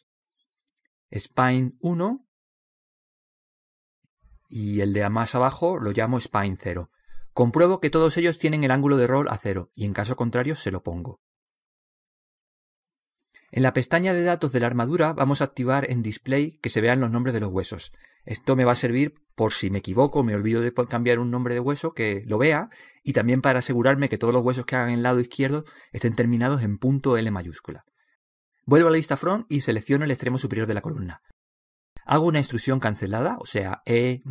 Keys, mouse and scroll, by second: 0.4 right click, 1.1-2.3 middle drag, 2.3 click, 5.3 right click, 6.2 click, 7.1 click, 11.4-15.5 right drag, 15.8-19.8 drag, 20.5-23.6 drag, 23.8-25.7 drag, 24.6 right click, 25.9 click, 30.0 KP_1, 31.4-32.7 right drag, 32.7 middle click, 33.2 click.